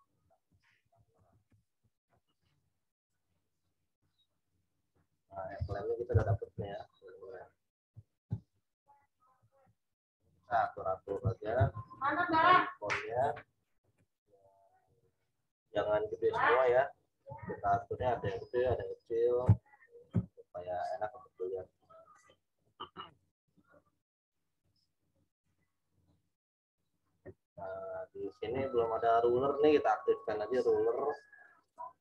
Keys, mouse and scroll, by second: 0.4 shift+t, 0.8 a, 3.5 click, 6.1 ctrl+t, 6.8 alt+shift+click, 8.3 Return, 8.5 Up, 9.1 Up, 10.6 right click, 11.0 click, 11.5 ctrl+t, 13.9 Return, 14.4 click, 18.6 Left, 19.4 Down, 20.1 Left, 22.1 right click, 22.5 click, 25.0 right click, 25.9 click.